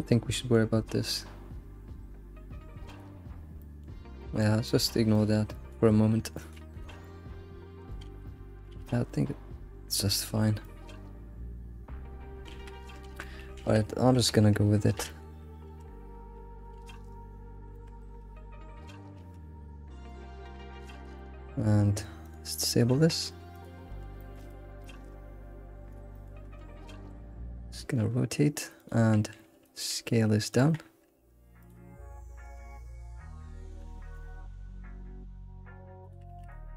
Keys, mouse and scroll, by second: 0.1 middle click, 0.7-2.9 scroll up 1, 2.9 click, 3.4-4.2 scroll down 6, 3.6 middle click, 4.2 middle click, 4.8-5.1 scroll down 3, 5.1 middle click, 5.8-6.3 scroll up 3, 6.3-8.0 shift+middle drag, 8.0 alt+shift+z, 8.2 middle click, 8.7 alt+shift+z, 8.8-10.5 middle drag, 10.5 scroll down 1, 10.6-12.5 middle drag, 12.5 alt+shift+z, 13.0 alt+shift+z, 13.2 middle click, 13.6 ctrl+s, 13.8-14.1 scroll down 2, 14.1 alt+q, 14.5 scroll down 3, 15.0 alt+shift+z, 15.6 Tab, 16.0 scroll down 3, 16.8 alt+shift+z, 17.0-17.5 scroll up 7, 17.8-18.1 shift+middle drag, 18.1 alt+shift+z, 18.8 click, 19.2 ctrl+s, 19.4-19.9 scroll down 7, 20.1 alt+middle click, 20.5 alt+middle drag, 21.2-22.3 shift+middle drag, 22.3 click, 23.0 g, 24.0 alt+x, 24.2 alt+middle click, 24.8 g, 26.2 alt+middle click, 26.5-26.8 scroll up 4, 27.0 r, 30.1 s, 31.9 scroll, 33.5 s, 34.1 g.